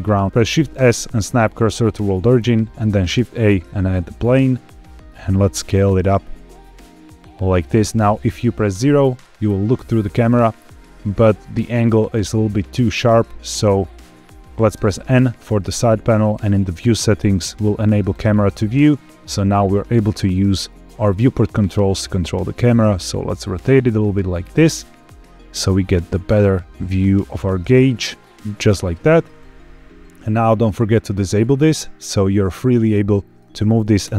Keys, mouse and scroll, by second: 0.4 shift+s, 2.2-2.6 scroll down 2, 2.9 shift+a, 5.0 scroll down 2, 5.3 s, 7.1-8.1 drag, 8.6 KP_0, 14.7 n, 14.7 n, 16.4 click, 18.0 click, 19.0 middle click, 21.7 middle click, 23.7 scroll down 1, 23.8 shift+middle click, 24.9-25.6 scroll up 2, 25.7 shift+middle click, 26.4-26.8 scroll up 1, 26.9 middle click, 31.3 click, 32.1-33.4 middle drag, 33.9 KP_0.